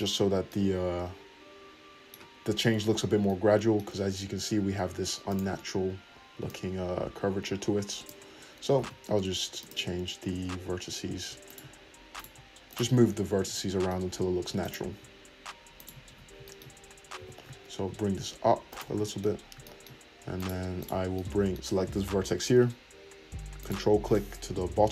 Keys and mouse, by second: 5.3-11.5 drag, 8.7 ctrl+z, 10.2 Tab, 11.5 shift+middle click, 11.5 shift+click, 12.1 middle click, 12.3 shift+click, 12.7 shift+middle click, 12.8-18.7 drag, 13.0 `, 14.6 middle click, 14.6 right click, 15.7 shift+middle click, 15.7 shift+right click, 16.1 `, 17.1 g, 18.7-20.3 shift+middle drag, 18.8 `, 20.3 click, 20.4 middle click, 20.8 click, 20.8-23.6 shift+middle drag, 23.6 ctrl+click, 23.7-24.9 ctrl+middle drag, 24.7 `.